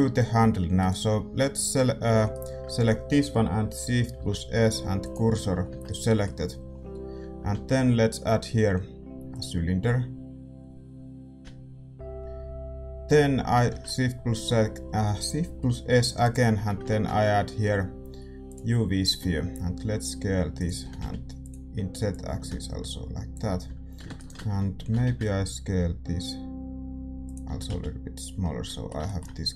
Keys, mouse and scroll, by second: 0.7-1.9 drag, 0.7-5.1 right drag, 1.9 a, 5.1 shift+s, 5.6 Tab, 5.8-9.3 middle drag, 9.3 shift+a, 9.8 s, 12.2-16.2 middle drag, 16.2 shift+s, 16.5 a, 18.5 shift+a, 19.0 s, 20.8 s, 22.0-24.1 drag, 23.6 a, 24.1-27.2 right drag, 24.7 s, 27.5 s, 28.4-29.5 middle drag.